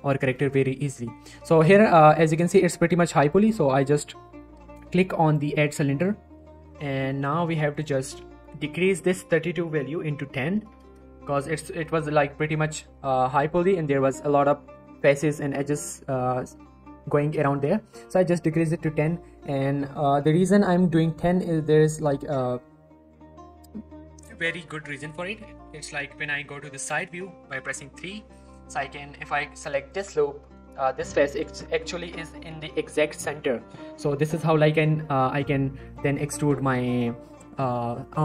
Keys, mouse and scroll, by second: 4.0 click, 7.7 click, 11.5 click, 11.8 z, 11.8 shift+middle click, 12.2 scroll down 1, 12.3 middle click, 12.4-12.9 scroll up 1, 14.2 middle click, 14.6 Tab, 15.5 middle click, 15.8 Tab, 16.2 middle click, 18.8 middle click, 19.3 scroll down 1, 20.6-21.1 middle click, 21.7 scroll up 1, 22.0 shift+middle click, 28.1 Tab, 30.1 scroll down 1, 30.8 scroll up 1, 31.3 z, 31.6 shift+middle click, 31.7-32.4 shift+scroll up 2, 32.5 shift+middle click, 32.6-33.2 shift+scroll up 1, 33.2 z, 33.4 scroll down 1, 33.6 middle click, 34.0 scroll down 1, 34.3 shift+middle click, 35.2-35.8 scroll up 1, 35.8 shift+middle click.